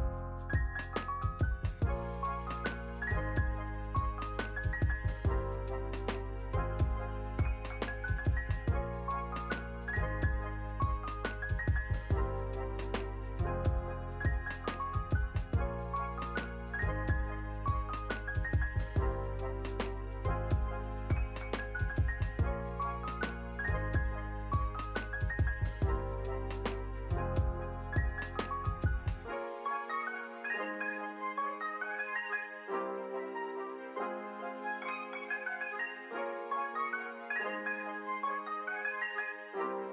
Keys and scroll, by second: 0.6 ctrl+v, 2.6 ctrl+c, 3.4 ctrl+v, 5.4 Delete, 14.8 space, 15.6 ctrl+s, 19.7 Escape, 33.0 ctrl+s, 37.2 space.